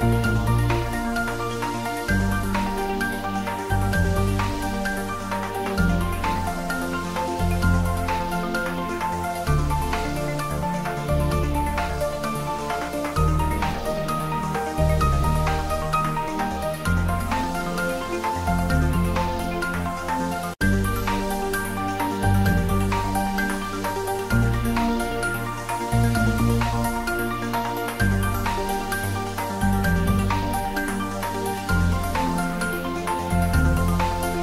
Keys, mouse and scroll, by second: 0.4 click, 2.2 middle click, 3.2 click, 4.4 click, 5.0 middle click, 5.7-8.9 drag, 8.9 middle click, 9.2 ctrl+middle click, 9.5 shift+middle click, 10.5 click, 11.8 Return, 20.0 ctrl+s, 21.7-23.6 middle drag, 23.6 click, 25.9 click, 28.9 click, 32.2 click, 32.4 ctrl+s.